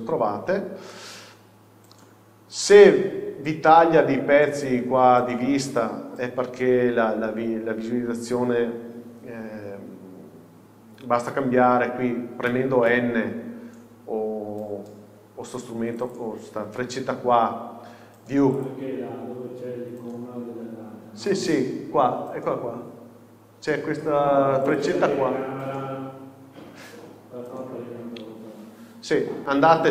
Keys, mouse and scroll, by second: 0.4 scroll down 1, 0.9-16.1 middle drag, 3.2-11.2 scroll up 1, 11.6 n, 16.1-21.1 drag, 21.1 n, 24.8-29.9 drag.